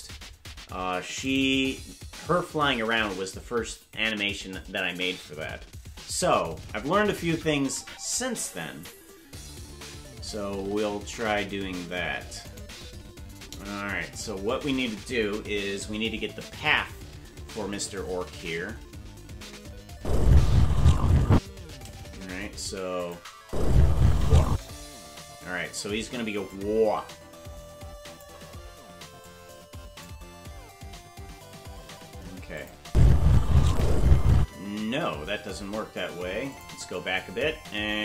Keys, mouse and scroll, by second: 9.9 scroll up 1, 10.4 scroll down 2, 11.0 ctrl+Tab, 12.7 right click, 16.7 scroll up 1, 19.9 space, 23.0 click, 23.4 space, 26.4-28.5 shift+drag, 29.2 click, 32.6 click, 32.8 space, 33.7 click, 34.3 space, 36.5 click.